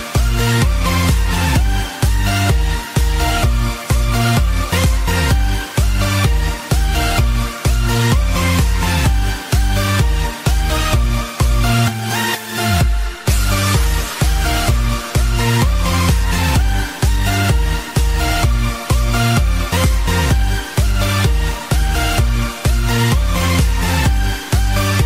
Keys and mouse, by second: 6.4 click, 8.9 click, 10.2 click, 12.5 click, 23.5 click.